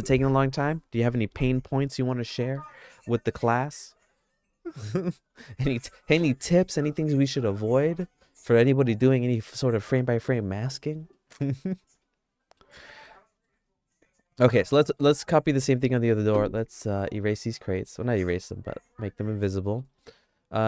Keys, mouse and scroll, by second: 10.7 middle click, 11.1 shift+middle click, 12.0 middle click, 12.8 middle click, 13.1-15.0 shift+middle drag, 19.6 middle click, 20.0 shift+middle click.